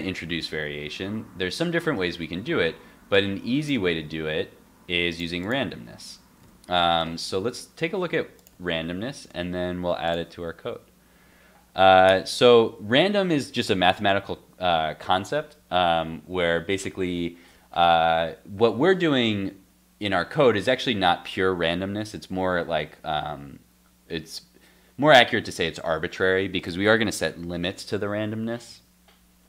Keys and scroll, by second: 1.9 super+s, 3.7 super+x, 4.0 super+s, 5.6 super+x, 5.8 super+s, 6.4 super+Tab, 7.5 super+r.